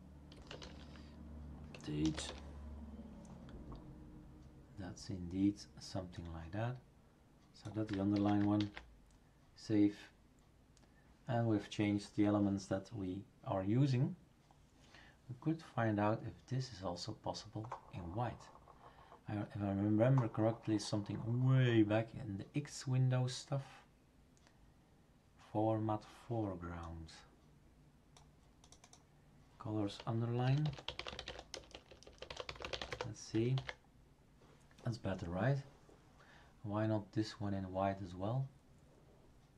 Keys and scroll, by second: 0.1-2.1 typing, 2.2 Return, 8.1 ctrl+v, 8.6 ctrl+s, 30.2-33.4 typing, 33.5 ctrl+s.